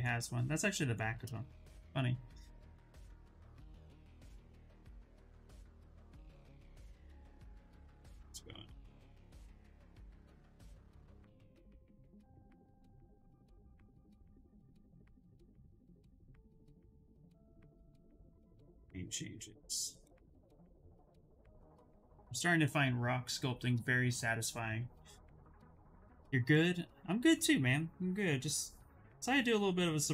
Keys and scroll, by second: 6.5 ctrl+z, 7.3 s, 15.7 ctrl+z, 15.8 ctrl+z, 16.1 ctrl+z.